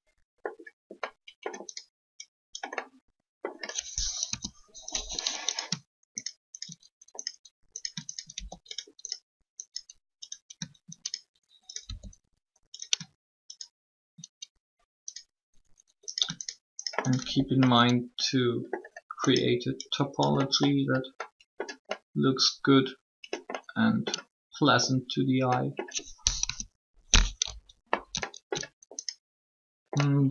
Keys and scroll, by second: 4.1 3, 11.8 shift+e, 26.3 3.